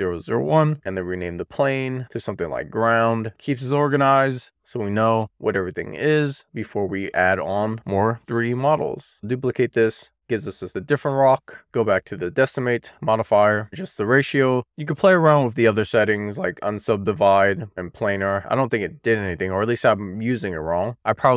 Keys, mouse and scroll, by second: 0.4 0, 0.8-2.8 drag, 9.4 middle click, 9.5 click, 9.7 middle click, 9.9 click, 10.4 shift+middle click, 11.0 click, 11.1 shift+middle click, 11.6 middle click, 14.8 click, 15.8-18.6 drag, 19.6 click, 21.2 click.